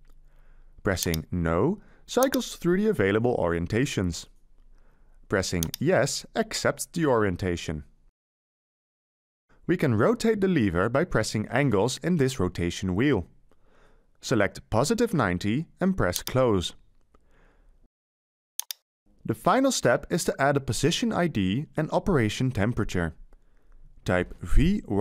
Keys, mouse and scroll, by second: 23.7-25.0 typing.